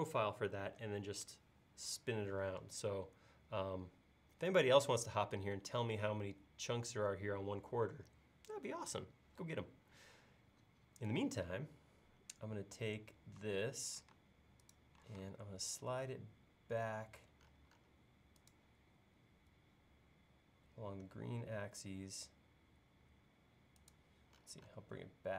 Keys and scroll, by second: 13.4 l.